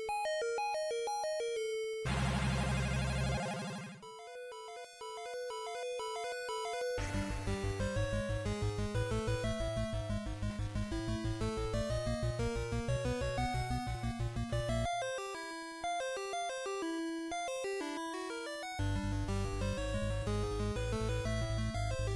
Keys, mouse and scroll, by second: 2.3 ctrl+Up.